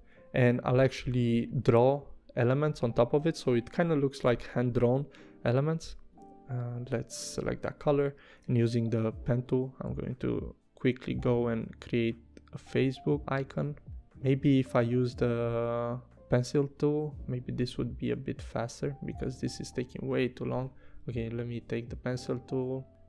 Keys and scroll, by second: 8.6 p, 19.8 v.